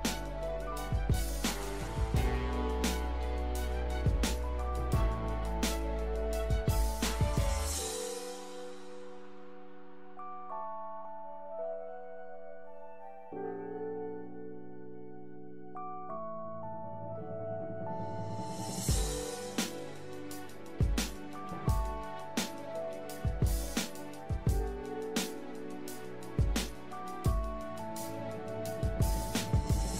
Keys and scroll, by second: 4.9 Delete.